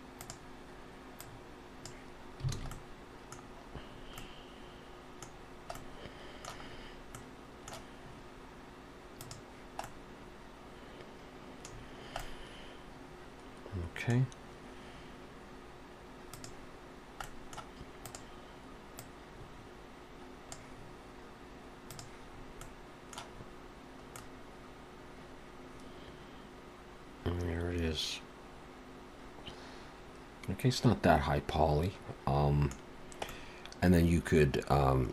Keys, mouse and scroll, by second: 0.2 click, 2.6 alt+a, 2.7 middle click, 3.4-4.2 scroll down 2, 3.9-4.3 scroll up 2, 4.2 middle click, 5.4 scroll down 1, 5.7 middle click, 6.7 scroll up 2, 7.2 middle click, 9.2 click, 9.8 middle click, 11.7-12.8 scroll down 4, 12.2 middle click, 14.2-14.8 scroll down 2, 16.4 click, 17.2 middle click, 18.0 click, 19.0 click, 21.9 click, 22.3-22.9 scroll up 2, 22.6 middle click, 23.3-24.1 scroll up 3, 24.1 middle click, 32.9 scroll down 1, 33.3 middle click.